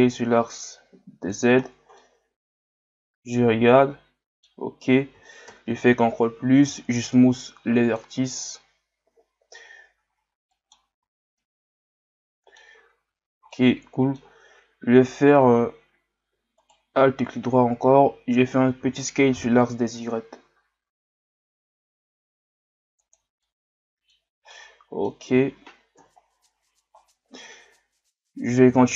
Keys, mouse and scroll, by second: 1.6-2.0 scroll down 2, 2.0-5.1 middle drag, 5.5 ctrl+KP_Add, 6.6 w, 10.5 middle click, 10.9 Tab, 11.4-12.8 middle drag, 12.8 scroll up 1, 13.1 Tab, 13.5-16.6 middle drag, 16.6 alt+right click, 23.4 middle click, 24.2 scroll down 1, 24.5-26.0 middle drag, 26.0 KP_1, 26.9-27.9 scroll up 2.